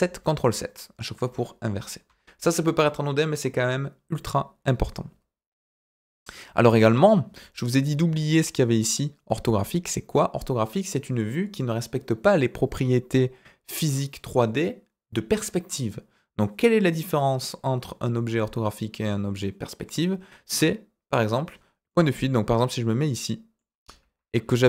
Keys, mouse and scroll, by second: 0.1 ctrl+KP_7, 2.0 KP_1, 6.4-6.7 scroll up 3, 21.8-23.5 middle drag.